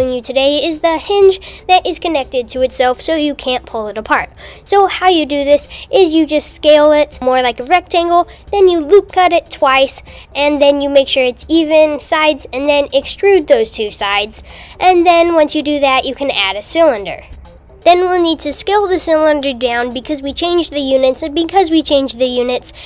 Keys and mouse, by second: 2.1 click, 2.3 super+Tab, 5.1 super+r, 5.4 super+r, 6.8 s, 8.3 click, 8.7 click, 9.3 e, 13.8 shift+a, 21.1 s.